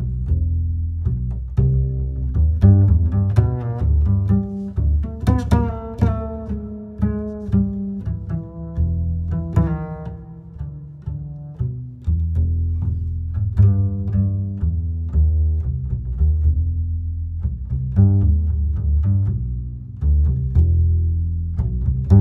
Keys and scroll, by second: 2.8 ctrl+z.